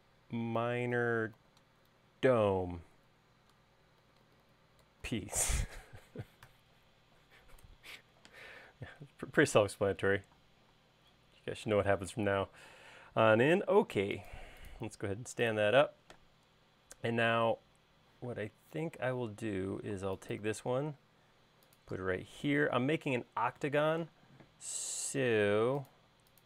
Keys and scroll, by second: 0.0-3.0 typing, 4.2-6.9 typing, 8.0 BackSpace, 8.5 Return, 12.0 q, 13.9 Left, 14.3 Right, 16.7 space, 18.6 m, 24.5 q.